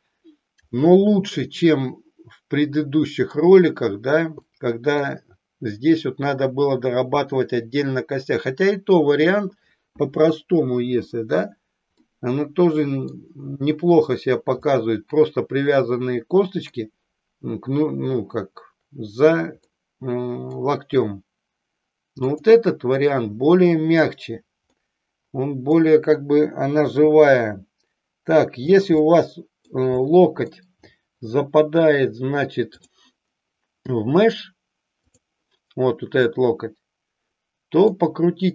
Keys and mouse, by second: 0.9-3.5 middle drag, 4.4 middle click, 12.1-13.4 middle drag, 14.6-16.9 middle drag, 19.7-20.7 middle drag, 22.2-24.1 drag, 25.0-26.0 middle drag, 27.0 r, 28.9 click, 29.0 middle click, 32.9 click, 36.2-37.9 middle drag.